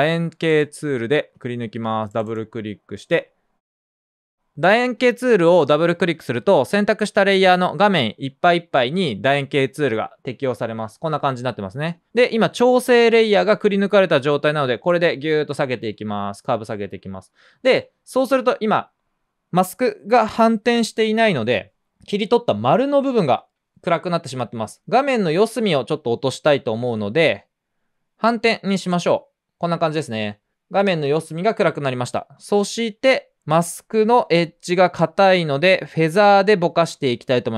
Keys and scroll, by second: 3.1 typing, 11.6-12.3 typing, 27.6-28.4 typing.